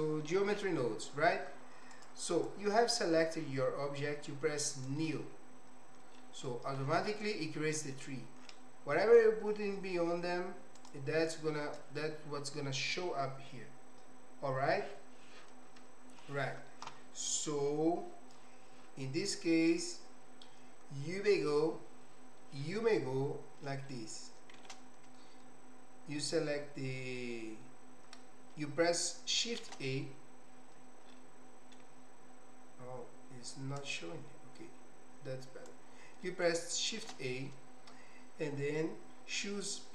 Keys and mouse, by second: 7.9 middle click, 33.9-35.6 drag, 36.2 middle click, 37.0 shift+a.